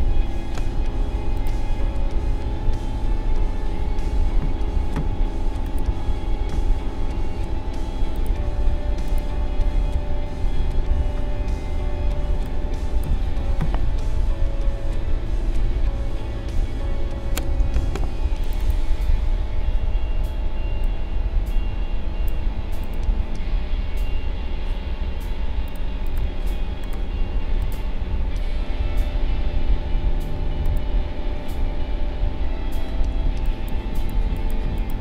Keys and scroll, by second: 12.3 space, 17.8 ctrl+shift+a, 33.2 space.